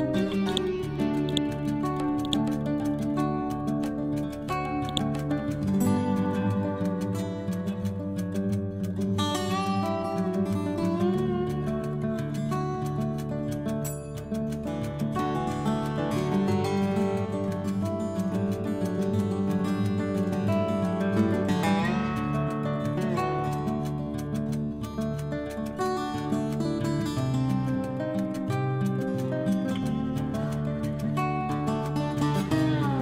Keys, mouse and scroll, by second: 5.2-6.2 typing, 6.6 Return, 7.3 shift+f, 9.0-10.9 scroll up 1, 10.9-26.2 typing, 16.3 Return, 29.1-30.7 typing, 32.0-33.0 typing.